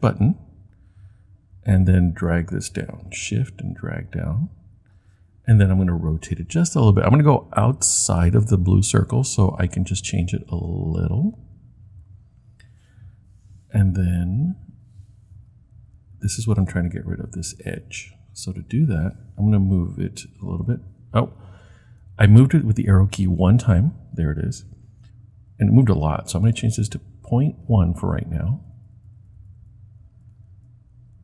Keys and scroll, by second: 20.3 Right, 21.4 Left, 23.2 Right, 27.9 Left, 28.3 Left, 28.5 Left, 28.7 Left, 28.9 Left, 30.1 Left, 30.5 Left.